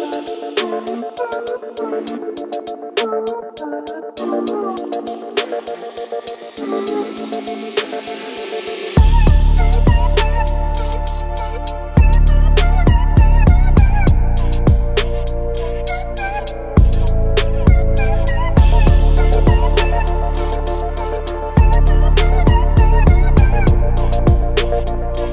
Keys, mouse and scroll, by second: 5.0 r, 5.8 z, 8.0 middle click, 8.8 click, 9.5-11.0 middle drag, 14.0-14.5 middle drag, 14.9-15.5 middle drag, 16.1-17.0 middle drag, 17.4 middle click, 18.8-19.8 middle drag, 20.0-21.1 middle drag, 22.2 middle click, 24.5 ctrl+alt+KP_0.